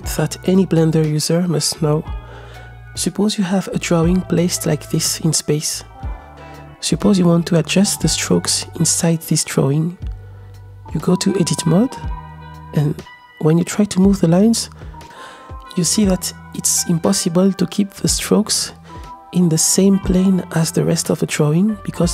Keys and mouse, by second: 0.0 r, 4.0-6.5 shift+middle drag, 6.9-7.6 shift+middle drag, 12.1 Tab, 12.6-13.6 drag, 14.2-15.0 middle drag, 15.0 ctrl+z, 15.0 l, 15.5 g, 16.4-18.0 middle drag, 19.2-20.6 middle drag, 20.9 g, 21.9-22.1 middle drag.